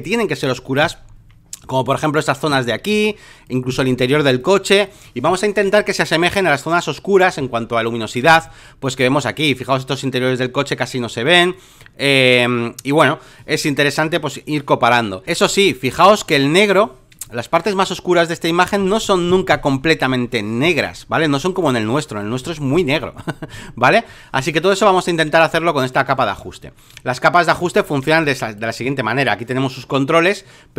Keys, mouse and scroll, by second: 0.0 ctrl+click, 2.9 space, 3.1 click, 4.4 click, 5.8 click, 8.5 click, 9.6 click, 11.2 click, 11.8-12.8 drag, 13.0 click, 13.7 click, 16.0 space, 16.2 click, 17.2 click, 17.8 click, 18.8 alt+middle click, 18.9 alt+middle click, 19.0 alt+middle click, 19.5 alt+middle click, 19.7 alt+middle click, 20.1 alt+middle click, 20.4 alt+middle click, 20.7 alt+middle click, 21.0 alt+middle click, 21.3 space, 21.3 click, 21.8 click, 25.2 middle click, 25.3 space, 25.5 click, 26.9 space, 27.1 click, 27.8 alt+middle click, 28.1 space, 28.2 click, 29.5-30.7 drag.